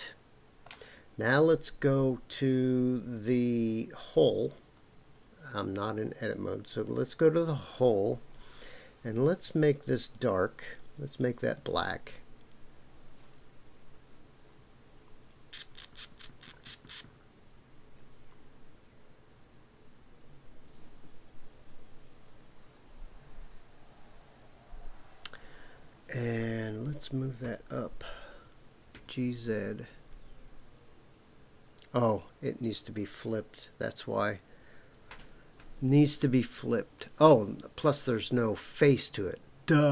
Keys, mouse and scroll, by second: 6.7 click, 10.1-11.7 drag, 27.4 g, 28.9 z, 35.1 Escape.